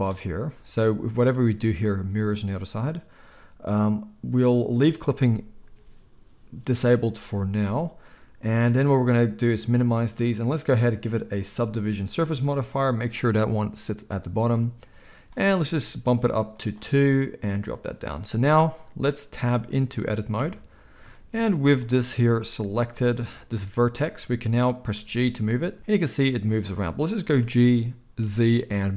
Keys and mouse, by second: 0.0-9.0 middle drag, 9.0-28.9 drag, 20.3 Tab, 21.4 z, 24.9 g, 27.4 g.